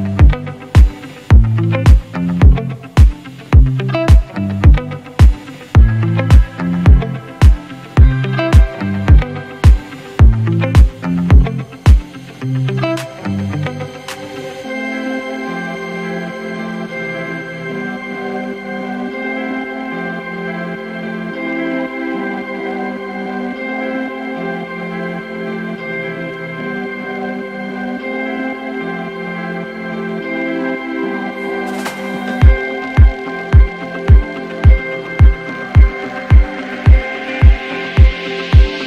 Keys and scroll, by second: 0.1 space, 8.7 Return, 9.8 ctrl+s, 13.1 t, 15.8 shift+i, 18.0-18.7 typing, 24.6-27.3 typing, 28.9 ctrl+t, 36.8 ctrl+t.